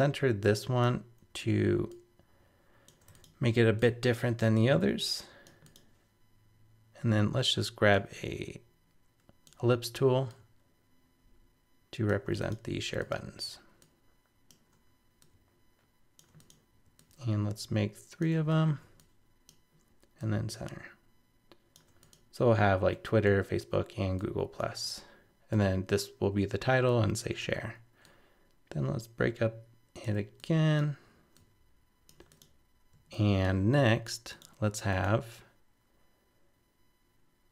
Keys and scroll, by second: 18.5 super+d.